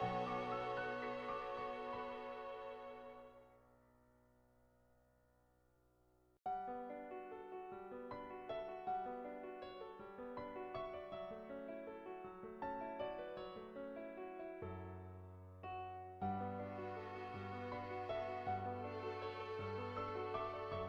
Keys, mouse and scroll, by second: 0.3 ctrl+z, 0.8-2.5 drag, 3.7-5.6 drag, 7.2-8.8 drag, 9.7 click, 10.1 ctrl+z, 10.3 click, 11.7 click, 12.0-13.2 drag, 13.2 ctrl+z, 13.6 click, 14.7 ctrl+z, 15.0 shift+click, 15.9 middle click, 17.3-18.6 drag, 18.8 ctrl+z, 19.2-20.8 drag.